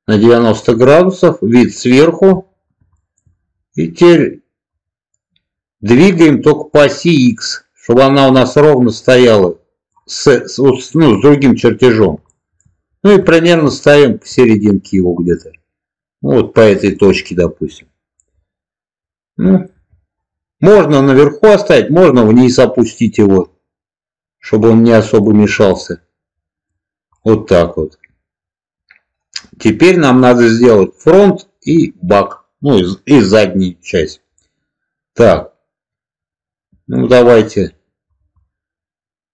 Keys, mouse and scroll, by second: 0.3 ctrl+click, 0.9-2.2 middle drag, 2.8 shift+middle click, 2.8 scroll up 1, 3.1 scroll down 1, 6.5-9.8 drag, 12.2-12.5 shift+middle drag, 13.3 shift+middle click, 13.9 shift+middle drag, 14.9 click, 18.2-19.6 middle drag, 21.6-25.1 drag, 25.7-26.6 middle drag, 27.0-29.5 middle drag, 30.0-30.9 middle drag, 34.3-36.9 middle drag, 38.3-39.3 middle drag.